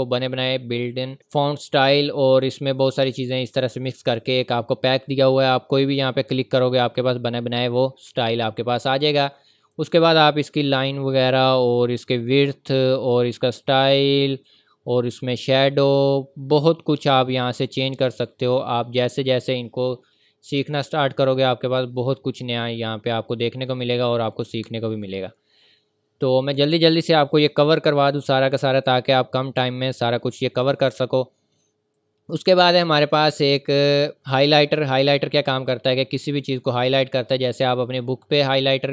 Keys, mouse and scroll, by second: 6.9 click, 9.6 click, 24.3 click, 33.0 click, 36.0 click.